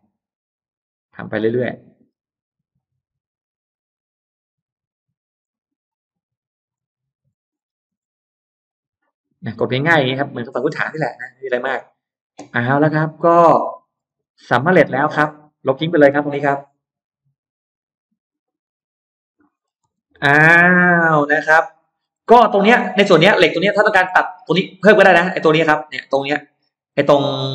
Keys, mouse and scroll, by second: 0.0 click, 1.4 click, 1.8-2.2 scroll down 2, 2.4 scroll up 2, 2.6-3.0 scroll down 2, 3.6 click, 4.6 click, 5.2 click, 5.9 click, 6.6 click, 7.4 scroll down 2, 7.9-8.4 scroll up 2, 8.5 click, 9.2 click, 12.3 middle click, 13.0-15.3 scroll down 5, 13.5 middle click, 14.0 space, 14.3 click, 14.8 middle click, 16.0 e, 16.1 click, 16.9 click, 17.6 click, 18.2 middle click, 18.4-18.7 scroll up 1, 18.8 click, 19.3 middle click, 19.4 scroll down 1, 19.6 space, 19.8-20.8 scroll up 2, 20.9 middle click, 21.8-22.2 scroll down 2, 22.0 middle click, 22.8-24.0 scroll up 3, 23.7 middle click, 24.3-24.6 scroll down 1, 24.8 scroll up 1, 25.0 middle click, 26.8 middle click.